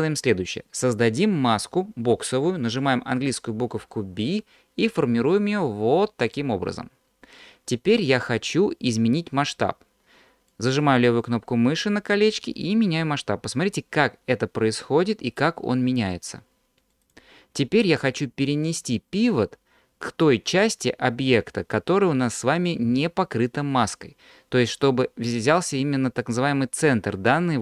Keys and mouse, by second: 3.6 b, 10.5-16.9 drag, 16.9 middle click, 17.0 click.